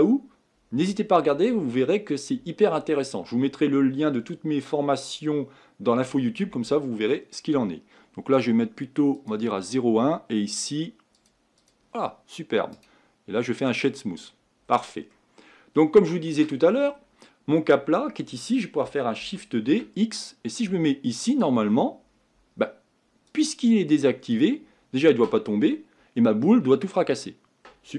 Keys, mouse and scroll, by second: 0.2-13.8 drag, 13.8 right click, 14.2-15.1 scroll down 8, 15.1-16.9 middle drag, 16.9-18.9 scroll up 5, 21.7-23.4 scroll down 7, 23.4-27.9 drag.